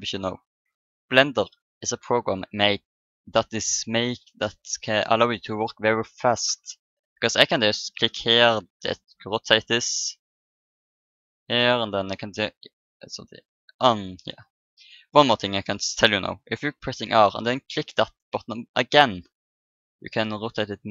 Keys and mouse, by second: 6.4 KP_0, 8.6 r, 16.8 r.